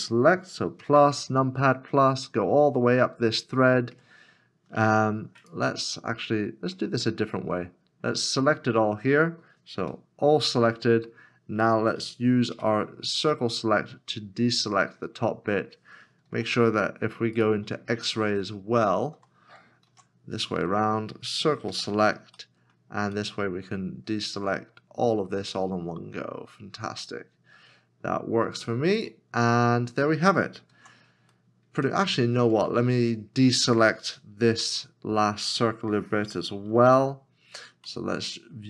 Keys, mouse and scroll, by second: 0.8 ctrl+KP_Add, 0.9 ctrl+KP_Add, 1.2 ctrl+KP_Add, 1.7 ctrl+KP_Add, 3.9 ctrl+KP_Add, 6.0 middle click, 7.8 scroll down 1, 9.8 a, 12.5 c, 13.3 middle click, 16.3 shift+z, 17.8 right click, 18.7 shift+z, 19.9 alt+z, 22.4 c, 22.4 middle click, 29.0 right click, 30.7 alt+z, 31.3 middle click, 32.2 scroll up 1, 34.7 middle click, 37.9 /, 37.9 middle click.